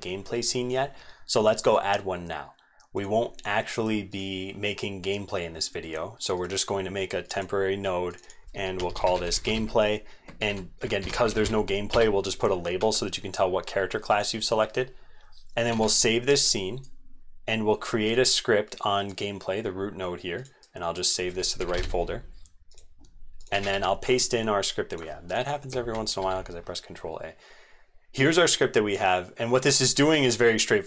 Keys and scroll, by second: 10.4 ctrl+a, 15.7 ctrl+s, 23.6 ctrl+a, 23.7 ctrl+v, 25.8 ctrl+a, 26.2 ctrl+v.